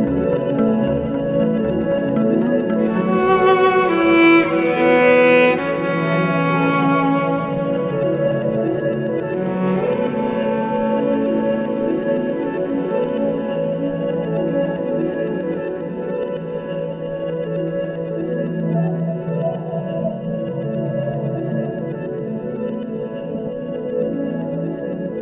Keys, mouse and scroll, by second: 4.9-6.7 drag, 16.5 click, 17.0 click, 17.6 click.